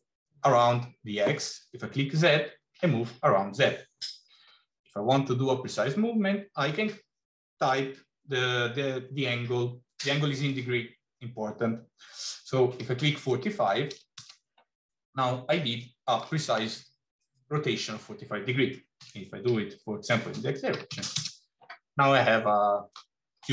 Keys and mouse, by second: 15.2 middle click, 18.8 r, 21.9-22.7 middle drag.